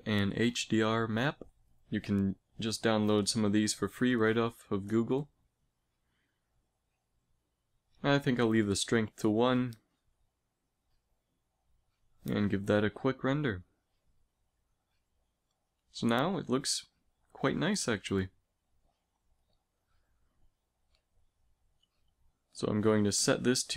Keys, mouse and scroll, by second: 7.1-8.9 middle drag, 11.5 middle click, 13.1 shift+z, 19.7 z, 20.0 z, 20.6-21.8 drag, 21.8 KP_0.